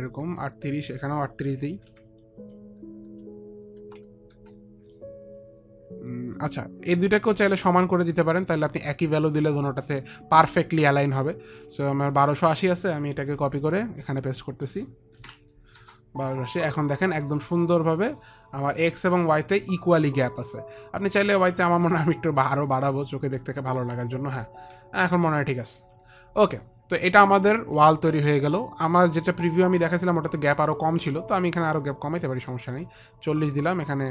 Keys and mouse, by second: 1.0 click, 2.3 KP_Decimal, 3.4 BackSpace, 4.1 click, 4.1 KP_8, 4.1 BackSpace, 4.1 KP_Decimal, 4.7 Return, 6.5 Return, 6.5 KP_8, 6.5 BackSpace, 7.6 Return, 7.6 KP_8, 12.6 click, 13.7 ctrl+c, 13.7 click, 14.6 ctrl+c, 14.6 click, 15.5 ctrl+v, 19.8 Return, 22.6 click, 31.4 click, 32.6 click.